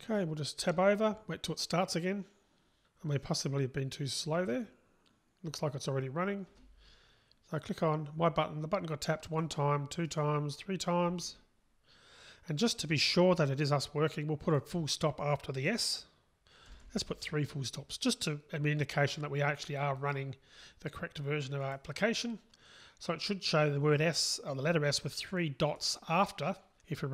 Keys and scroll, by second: 21.8 ctrl+shift+r, 26.1 ctrl+shift+r.